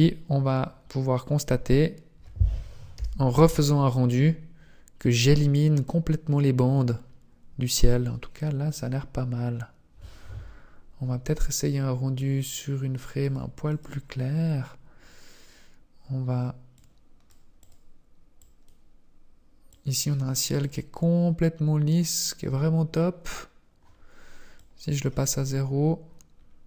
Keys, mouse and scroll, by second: 12.8 click, 15.0 click, 18.4 click, 19.6 click, 21.3 click, 24.4 click, 25.9-26.6 scroll up 1.